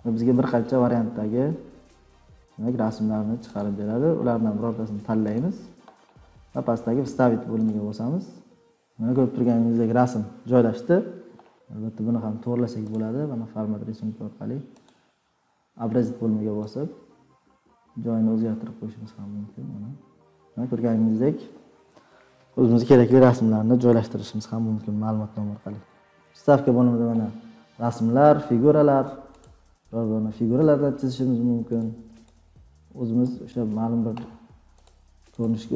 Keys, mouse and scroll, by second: 0.6 scroll, 1.3-1.7 scroll, 3.5 scroll down 8, 3.6 click, 4.2 scroll down 2, 5.3 click, 7.6 click, 11.9 click, 12.9 click, 14.8 click, 20.4 click, 26.9 click, 26.9 scroll, 29.4 click, 31.8 click, 33.2 click, 34.8 click, 35.4 click.